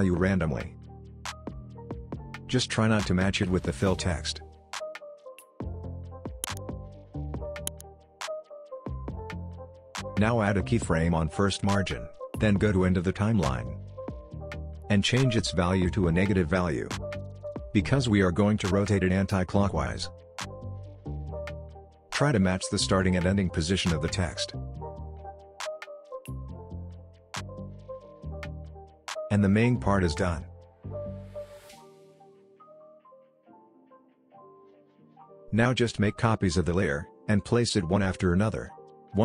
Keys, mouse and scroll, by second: 11.2-13.8 drag, 18.5 click, 19.1 drag, 35.4 ctrl+d, 35.7 scroll down 1, 35.8-36.4 click, 36.7 ctrl+d, 36.9-38.2 drag, 38.5 ctrl+d, 38.8-39.2 click.